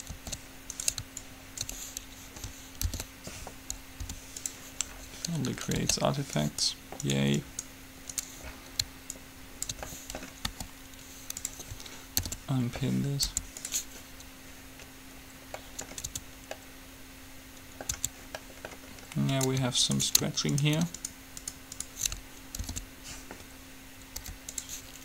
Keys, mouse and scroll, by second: 0.3 ctrl+z, 1.1-2.6 right drag, 1.4-3.1 drag, 3.1 alt+p, 4.1 u, 6.1 ctrl+z, 6.6-7.7 right drag, 10.3 click, 10.6 g, 12.4 alt+p, 13.4 u, 15.1-16.2 middle drag, 16.3 Tab, 18.0 Tab, 20.6-23.6 right drag, 22.8 alt+p, 24.3 u.